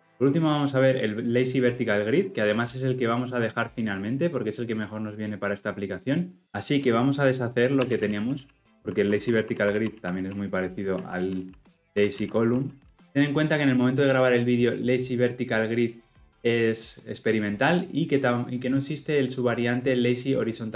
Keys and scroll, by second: 7.8 ctrl+z, 8.7 ctrl+z, 9.3 ctrl+z, 9.9 ctrl+z, 10.9 ctrl+z, 11.7 ctrl+z, 12.5 ctrl+z.